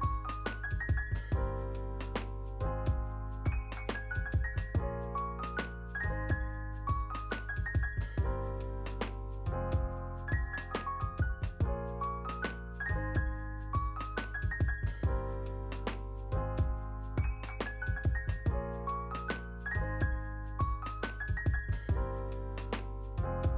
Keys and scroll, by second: 16.4 ctrl+x.